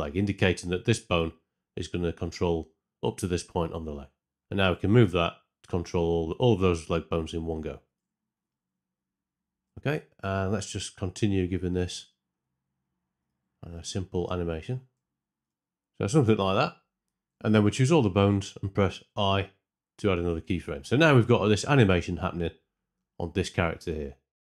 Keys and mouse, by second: 3.8 middle drag, 4.6 g, 7.8-8.3 drag, 10.5-12.8 typing, 10.9 click, 11.7 click, 14.3 r, 14.7 r, 17.6 a, 19.0 i, 21.1 shift+Left, 22.9 space, 23.8 space, 24.2 Tab.